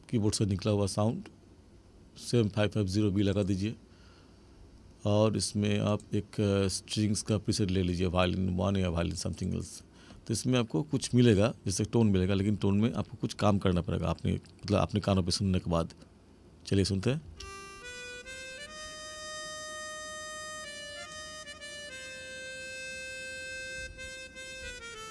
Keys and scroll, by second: 17.2 space.